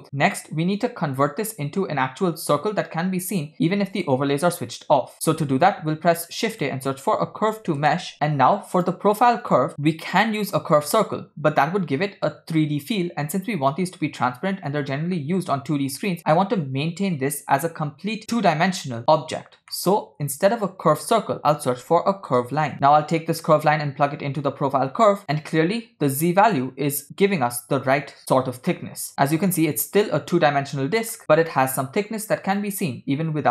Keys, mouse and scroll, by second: 0.0-0.8 scroll down 5, 0.8-1.3 drag, 4.0 click, 5.1 click, 5.9 shift+a, 9.7 middle click, 10.2 click, 19.8 middle click, 20.4 shift+a, 24.5 click, 25.2 middle click, 28.9-31.1 middle drag, 31.3 KP_7, 32.5 click.